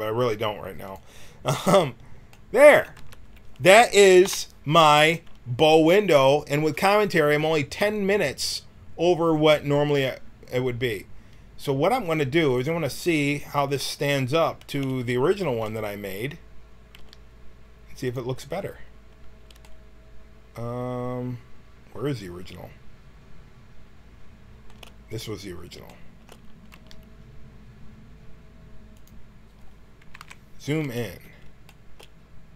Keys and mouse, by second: 0.8-2.2 drag, 3.0 Tab, 4.2 KP_1, 4.7 a, 9.2-12.5 middle drag, 12.5-14.3 drag, 13.8 middle click, 14.6-15.8 middle drag, 16.3 middle click, 16.9 g, 25.5 right click, 26.7 g, 30.1 KP_Decimal, 30.8 a.